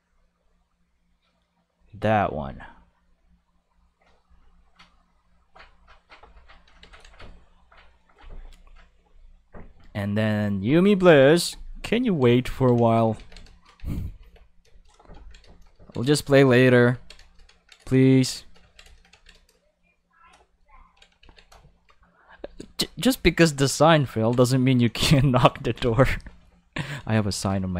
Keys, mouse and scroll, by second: 0.9 click, 1.7 click, 2.9 click, 3.6 click, 4.2 click, 4.8 click, 5.4 click, 6.8 ctrl+s, 9.1 click, 10.6-12.0 drag, 12.0 ctrl+middle click, 12.4 ctrl+middle click, 12.7 ctrl+middle click, 13.1 ctrl+s, 14.2 ctrl+s, 14.6 shift+middle click, 15.2 ctrl+middle click, 15.5 shift+middle click, 15.8 ctrl+middle click, 18.2 shift+middle click, 18.6 ctrl+middle click, 18.9 middle click, 19.3 shift+middle click, 20.8 ctrl+middle click, 21.2 ctrl+s, 22.8 ctrl+middle click, 25.3 shift+middle click, 25.9 shift+middle click, 27.3 ctrl+middle click, 27.5 shift+middle click.